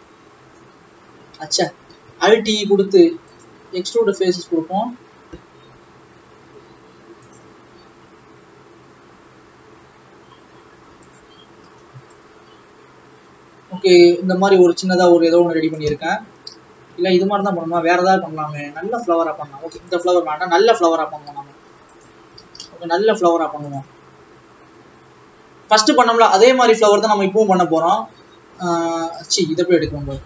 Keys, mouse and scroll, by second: 1.4 ctrl+z, 3.6 alt+e, 11.7 alt+a, 12.2 Left, 17.0 Tab, 17.8 click, 20.0 x, 22.1 shift+s, 28.4-29.0 scroll down 10, 29.0 x.